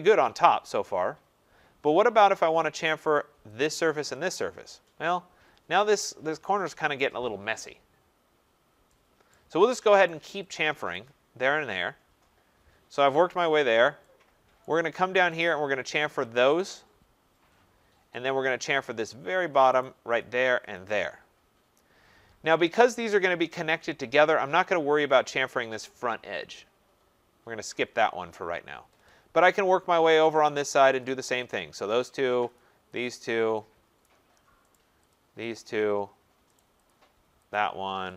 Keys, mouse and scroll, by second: 0.1 middle click, 0.2 middle click, 1.4 middle click, 1.4 middle click, 2.1 middle click, 3.2 right click, 3.6 click, 4.2 click, 4.9 middle click, 5.1 middle click, 8.1 middle click, 8.2 middle click, 9.3 right click, 10.1 right click, 10.5 click, 11.0 click, 12.0 middle click, 12.1 middle click, 13.5 middle click, 13.6 middle click, 13.6 middle click, 14.6 right click, 15.1 scroll, 15.4 right click, 15.9 click, 16.3 click, 17.6 scroll, 18.6 right click, 18.8 middle click, 18.9 middle click, 19.3 middle click, 19.3 middle click, 19.4 middle click, 19.8 right click, 20.2 click, 20.7 click, 23.2 right click, 29.1 scroll down 2, 30.0 scroll up 3, 30.7 right click, 31.0 click, 31.5 click, 32.1 right click, 32.6 click, 33.0 click, 34.0 right click, 34.7 right click, 35.1 click, 35.6 click, 36.0 middle click, 36.6 right click, 36.9 click, 37.5 click.